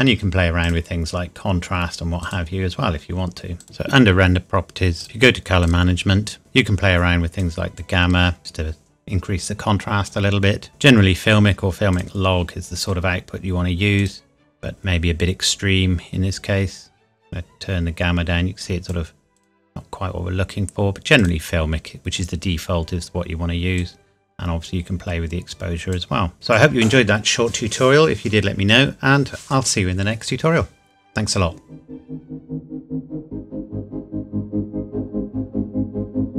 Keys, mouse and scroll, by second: 5.0 click, 7.4 click, 16.3 click, 23.8 click, 26.3-28.1 scroll up 1.